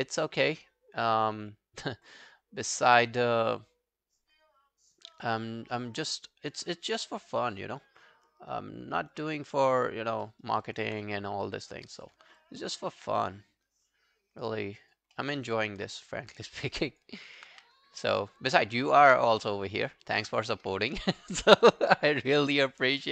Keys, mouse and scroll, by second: 10.3 alt+middle click, 10.5 alt+right click, 10.7 alt+click, 11.0 right click, 12.2 scroll down 2, 12.4 alt+click, 15.2 alt+middle click, 15.4 alt+right click, 15.6 alt+click, 16.3 alt+scroll down 2, 16.6 alt+right click, 16.9 alt+click, 17.2 alt+right click, 17.5 q, 17.8 right click, 19.3 shift+click, 20.1 shift+click, 20.5 alt+click, 21.2 alt+middle click, 21.4 alt+right click, 21.7 alt+click, 22.1 alt+middle click, 22.3 alt+right click, 22.5 alt+click, 23.0 alt+middle click.